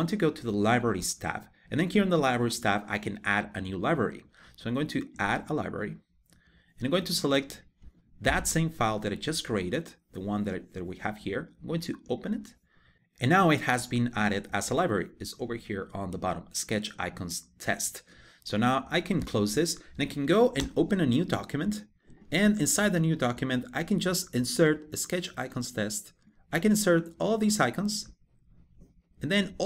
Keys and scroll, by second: 20.2 super+n.